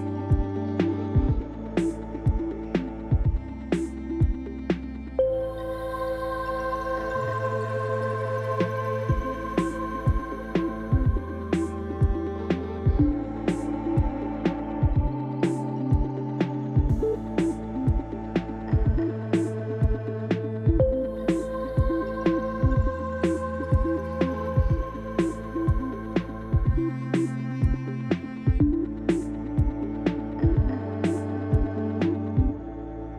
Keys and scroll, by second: 1.7 ctrl+b, 4.7 Tab, 13.6 ctrl+l, 20.9 Tab, 21.8 1, 23.2 3, 23.8 shift+z, 25.9 r, 27.7 shift+z, 29.3 Tab, 31.2 7, 32.3 shift+z.